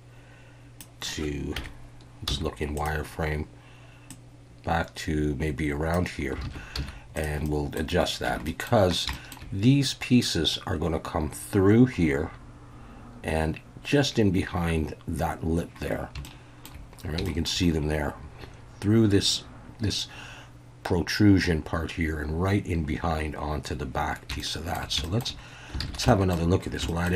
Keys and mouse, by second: 1.6 KP_3, 2.3 z, 4.1-5.9 drag, 6.4 alt+a, 6.8 z, 7.4-7.8 middle drag, 8.3 Tab, 8.5 middle click, 9.1 shift+middle drag, 16.2 shift+middle click, 17.2 shift+middle drag, 24.4-24.7 shift+middle drag, 25.0 shift+middle drag, 25.8 alt+a, 26.1 shift+middle drag, 26.9 shift+middle drag.